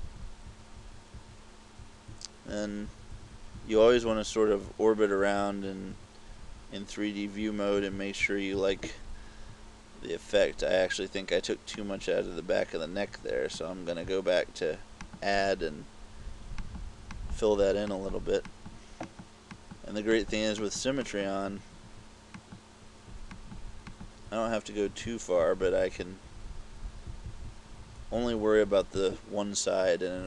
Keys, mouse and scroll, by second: 0.0-8.6 typing, 11.8 click, 15.1 click, 16.7 click, 17.2 click, 18.0 click, 18.6 click, 19.1 click, 19.6 click, 20.2 click, 20.7 click, 21.1 click, 22.4 click, 23.4 click, 24.0 click, 25.0-28.6 typing.